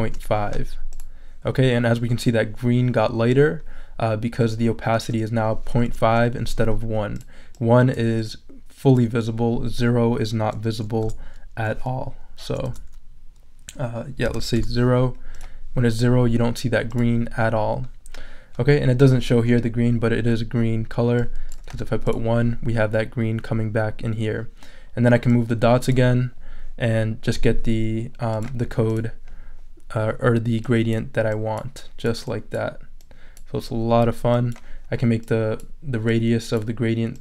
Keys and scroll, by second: 0.0-0.5 typing, 11.0 BackSpace, 12.7 BackSpace, 14.2 space, 14.5 0, 21.7 i.